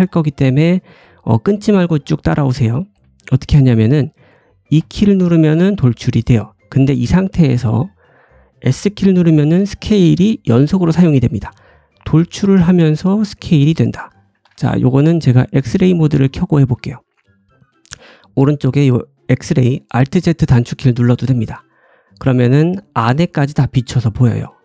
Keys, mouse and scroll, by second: 4.7 e, 13.9-24.6 drag, 14.4 ctrl+z, 21.7-24.6 middle drag, 21.7-24.6 right drag, 22.3-23.0 scroll up 2, 23.0-24.6 scroll down 1.